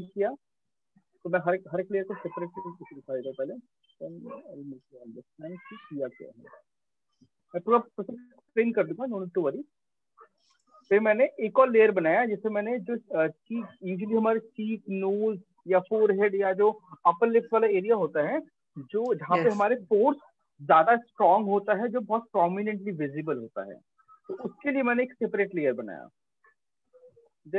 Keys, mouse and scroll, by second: 2.2 click, 4.5 click, 7.6 click, 25.7 click.